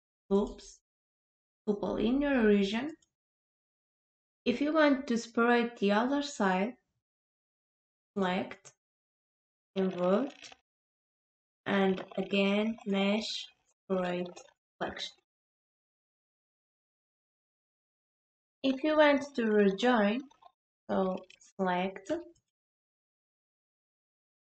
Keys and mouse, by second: 8.1-10.4 drag, 12.9-14.8 drag, 22.4 shift+click.